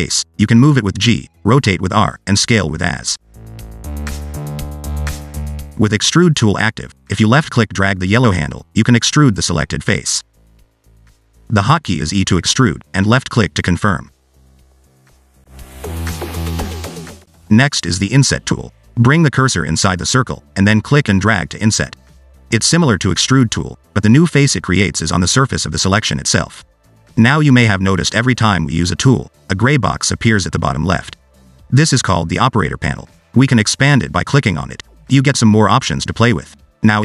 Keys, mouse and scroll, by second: 6.5 click, 8.0 click, 9.4 click, 10.0 click, 12.1 click, 12.7 e, 13.6 click, 13.7 e, 14.8-15.2 ctrl+z, 19.2 click, 20.9 click, 21.8 click, 22.4 click, 23.4 ctrl+z, 23.7 ctrl+z, 23.9 ctrl+z, 24.7 click, 25.6 click, 33.6 click, 36.8 click.